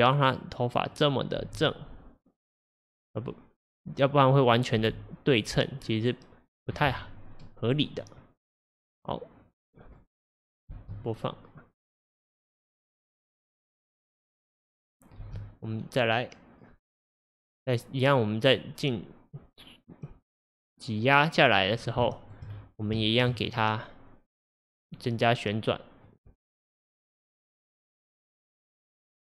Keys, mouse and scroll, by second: 1.0 click, 1.5 g, 4.5 click, 4.9 g, 5.9 scroll down 2, 9.7-10.8 drag, 10.3 scroll down 1, 10.8 space, 15.3 space, 16.1-19.4 drag, 22.1 shift+middle click, 22.6-23.1 scroll up 5, 23.1-24.9 shift+middle drag, 24.9 click, 26.1 click, 28.8 click.